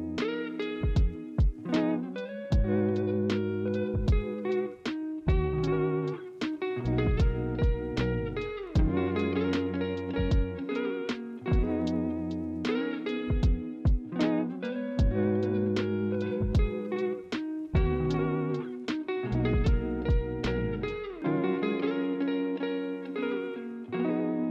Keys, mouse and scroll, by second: 9.5 ctrl+z.